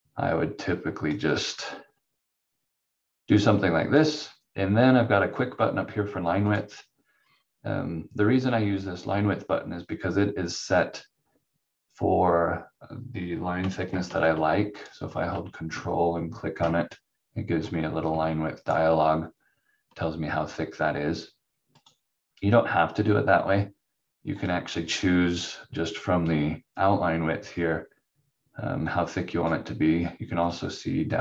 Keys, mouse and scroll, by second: 6.4 click, 14.8 ctrl+click, 21.8 click, 28.8 click.